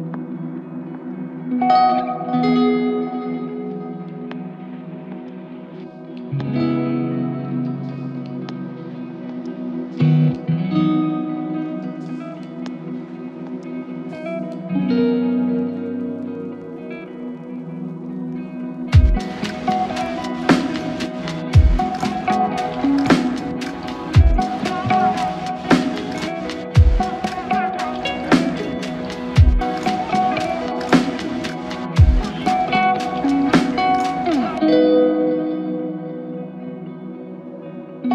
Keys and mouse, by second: 2.8 ctrl+click, 6.2-7.0 typing, 11.2 double click, 18.3 space, 21.3 double click, 32.9 double click.